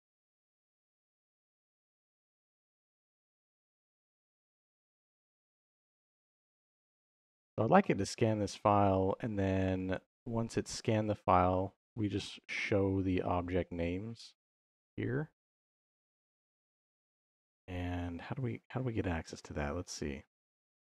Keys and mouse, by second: 7.3 middle click, 8.4-9.8 drag, 16.7 click.